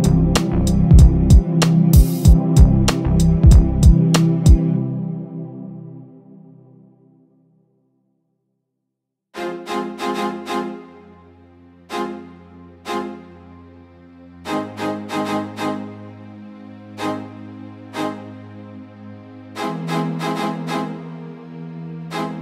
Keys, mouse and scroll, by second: 0.6 Left, 1.0 Left, 2.2 scroll down 4, 2.5-3.3 scroll up 3, 3.6 click, 4.2 KP_1, 4.5-5.0 scroll up 1, 5.0 click, 5.6 Tab, 6.3 shift+d, 8.3 r, 9.0-9.7 scroll up 4, 9.8 click, 11.9 g, 12.9 Tab, 13.1-13.8 scroll down 4, 14.0 click, 15.0 click, 16.9 shift+click, 19.3 click, 19.6 shift+click, 22.0 click, 22.1 click.